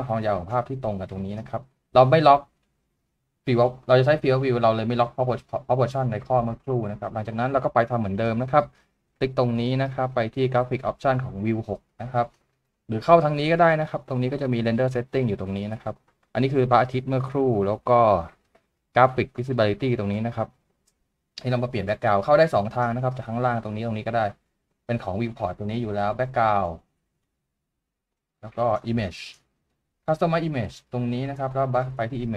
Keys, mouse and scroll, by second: 22.4 double click.